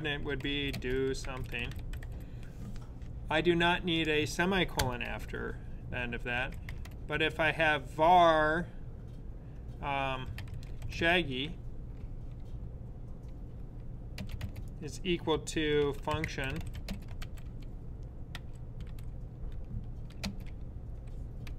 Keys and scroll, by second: 0.0-2.2 typing, 6.2 v, 8.7-11.4 typing, 14.1 typing, 15.3-18.0 typing, 21.3-21.5 typing.